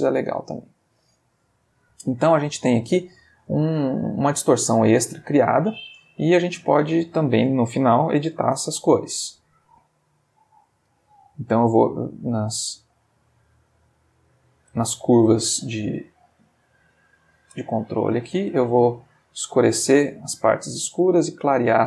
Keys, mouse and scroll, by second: 3.2 middle click, 4.7 middle click, 5.6-6.2 drag, 6.7 click, 8.2 shift+a, 12.4 click, 13.1 click, 13.7 middle click, 14.6 middle click, 15.4 middle click, 16.4-17.6 ctrl+drag, 16.9 middle click, 18.6-19.6 drag, 19.9 click, 21.1-21.8 drag.